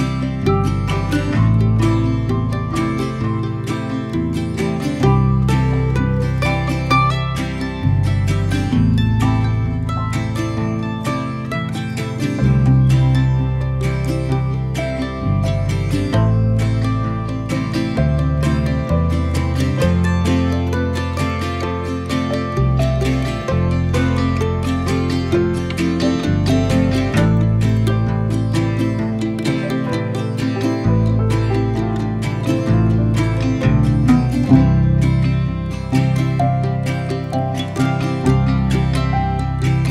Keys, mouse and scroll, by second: 6.4 middle click, 6.6 Tab, 7.9 ctrl+2, 9.7 Tab, 14.4 ctrl+b, 19.8-20.9 middle drag, 20.9 click, 21.2 z, 21.3-22.6 middle drag, 22.6 shift+click, 22.9-24.3 middle drag, 24.3 ctrl+b, 28.4 click, 29.5-32.0 drag, 34.3 click, 35.0-37.0 middle drag, 37.0 Tab, 37.7 right click, 38.7 middle click, 39.2 Tab, 39.8-39.9 middle drag.